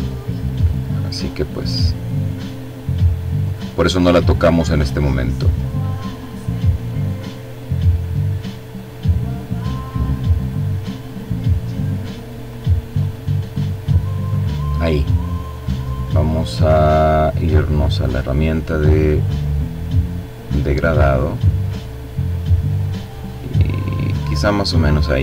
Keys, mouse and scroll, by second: 2.3 click, 3.1 click, 3.8 click, 4.4 click, 5.1 click, 5.9 click, 8.6 click, 9.2 click, 9.9 click, 10.6 click, 11.3 click, 12.4 click, 13.2 click, 16.9 click, 19.2-23.5 drag, 24.0 click, 25.1-25.2 drag.